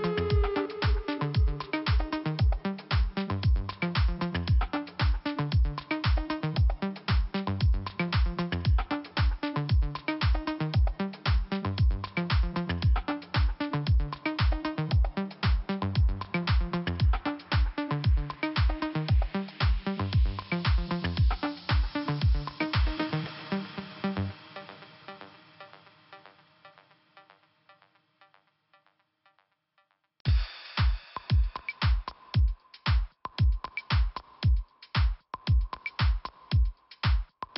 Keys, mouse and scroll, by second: 1.8 click, 5.1 click, 7.2 scroll up 1, 8.3 click, 11.4 click, 13.0 click, 17.0 scroll down 1, 17.8 scroll up 1, 18.7 click, 20.8 click, 24.8 scroll up 1, 26.1 click, 26.2 click, 27.4 click, 31.6 click, 31.9 click, 32.0 click, 32.1 double click, 32.3 double click, 32.4 double click, 32.4 double click, 32.6 double click, 35.9 right click, 36.7 click, 36.8 click.